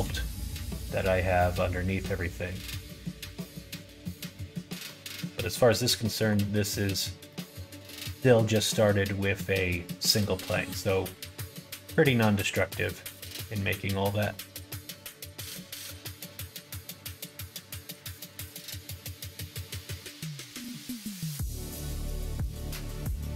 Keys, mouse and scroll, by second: 0.2 middle click, 2.5 click, 3.7 click, 6.0 middle click, 6.8 middle click, 7.2 middle click, 8.4 middle click, 14.2-15.4 middle drag, 17.2 click, 19.1 click, 20.1 click, 20.7 middle click, 21.1 click, 21.7 middle click.